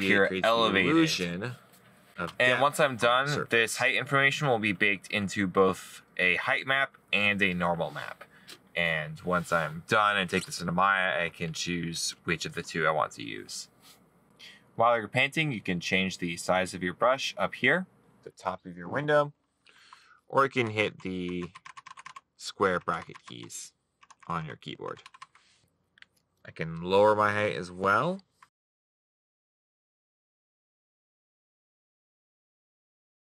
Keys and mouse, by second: 29.5 middle click.